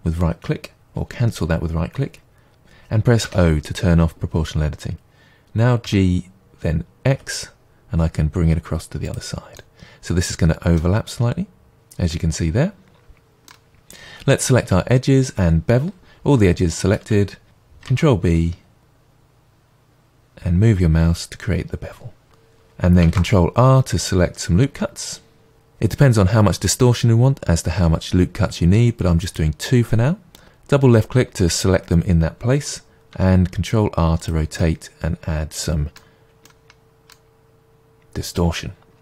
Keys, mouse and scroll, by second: 3.2 o, 5.8 g, 9.1 click, 9.6-22.2 middle drag, 14.7 2, 15.9 a, 17.8 ctrl+b, 22.2 Tab, 23.1 ctrl+r, 30.2 click, 33.1 r, 34.2 click, 34.6-39.0 middle drag.